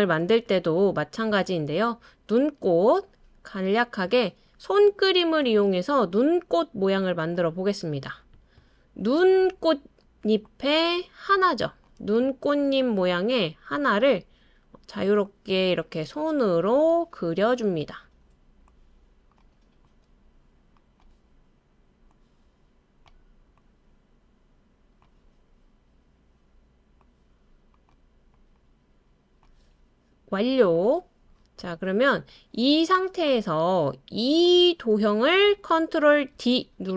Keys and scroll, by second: 36.3 super+d.